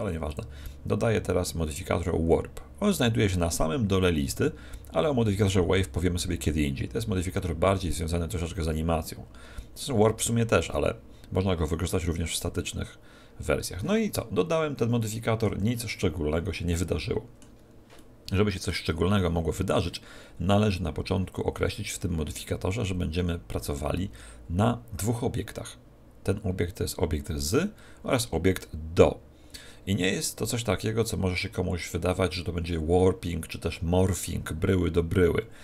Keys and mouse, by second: 0.3-2.3 drag, 14.1-35.6 middle drag, 15.5 z.